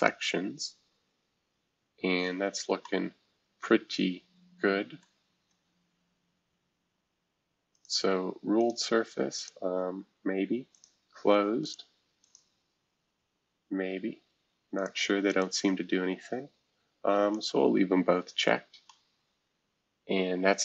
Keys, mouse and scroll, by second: 2.5-2.8 scroll up 1, 2.8-6.4 middle drag, 7.7 click, 8.6 click, 9.3 click, 10.7 click, 11.6 click, 12.2 click, 13.5-14.4 scroll down 2, 14.7 click, 15.3 click, 17.3 click.